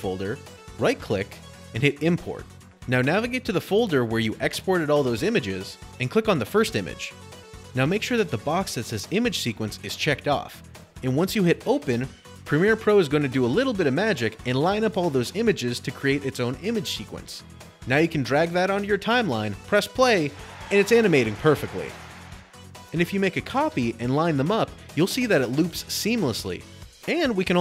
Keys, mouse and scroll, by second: 11.4 click, 16.5 click, 17.5 click, 19.4 click, 22.5 alt+click, 22.8 click, 22.9 click, 23.2 click, 24.2 click, 27.4 click.